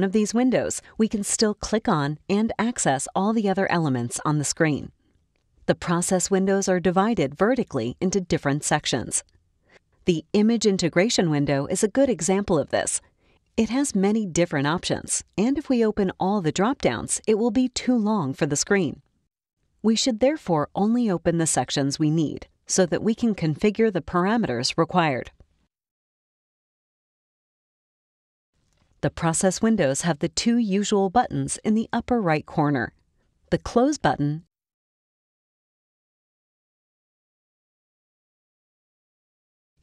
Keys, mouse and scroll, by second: 1.6 click, 2.6 click, 3.5 click, 4.4 click, 10.3-10.9 drag, 12.4 click, 13.1 click, 14.3 click, 15.6-16.7 drag, 17.8 click, 20.9 click, 21.5 click, 22.2 click, 22.8 click, 23.0 click, 23.7 click, 24.7 click, 25.2 click, 25.6 click, 26.7 click, 27.2 3, 27.8 Return, 34.4 click, 38.0 click.